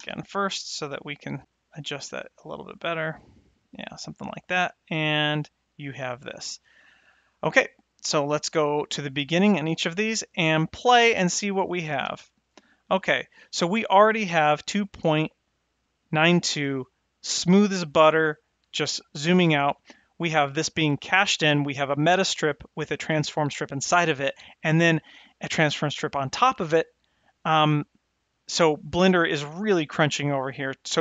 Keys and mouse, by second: 7.8 click, 8.4 shift+Left, 10.1 shift+Left, 11.4 space.